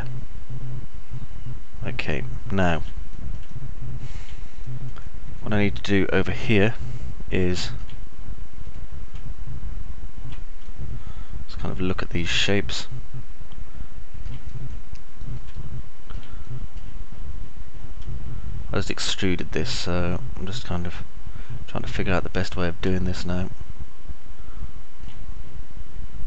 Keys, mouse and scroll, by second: 0.0-3.1 alt+middle drag, 3.3 middle click, 3.6-4.5 alt+middle drag, 5.0 middle click, 5.6-8.1 alt+drag, 5.6-8.1 alt+middle drag, 5.6-8.1 alt+right drag, 11.0-14.5 alt+drag, 11.0-14.5 alt+middle drag, 11.0-14.5 alt+right drag, 14.6 click, 14.6 middle click, 14.6 right click, 16.6 middle click, 18.3-22.5 alt+middle drag, 23.1-25.1 alt+middle drag, 23.1-24.0 alt+scroll up 1.